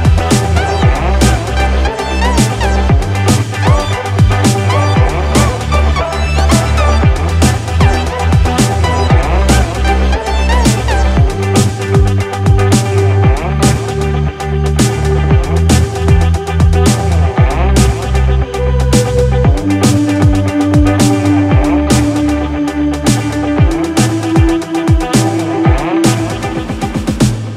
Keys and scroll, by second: 24.3 Return.